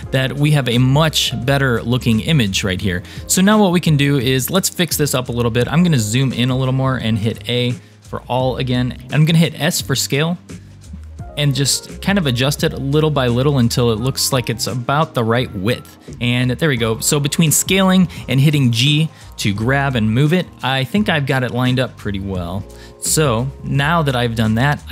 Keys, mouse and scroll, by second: 0.2-1.7 scroll down 2, 2.1-2.7 scroll up 3, 3.2 scroll up 1, 5.4-5.9 scroll up 4, 6.6 scroll up 2, 7.2 a, 7.8 scroll down 2, 9.2 s, 12.2 g, 20.4 scroll down 2, 21.5-24.1 shift+middle drag, 24.8 scroll up 2.